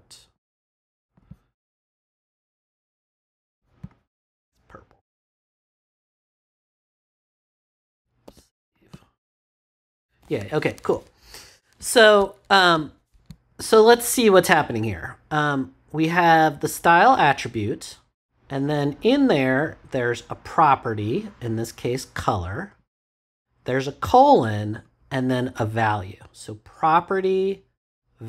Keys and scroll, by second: 8.2 super+s.